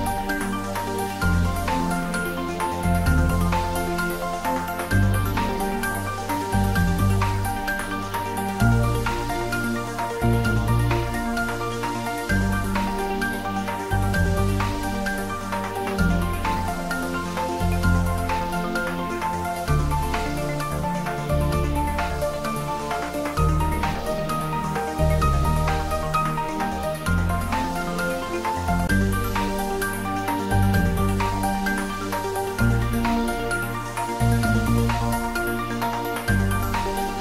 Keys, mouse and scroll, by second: 0.2-1.1 scroll down 1, 1.1-1.8 middle drag, 3.1-3.7 scroll up 1, 6.5-7.5 scroll up 1, 10.2 click, 16.7 scroll down 1, 24.8-25.5 scroll up 1, 26.3-27.3 drag, 27.8-29.0 scroll down 1, 29.0 click, 30.1-31.4 scroll up 1, 31.4-32.4 drag, 32.9-34.8 scroll up 1, 34.8-36.1 drag, 36.9 Tab.